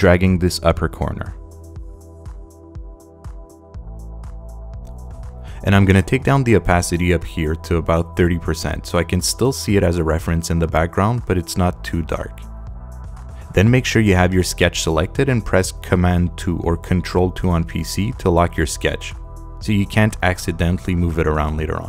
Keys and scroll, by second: 7.6-8.5 typing, 9.0 Tab, 17.6 super+2.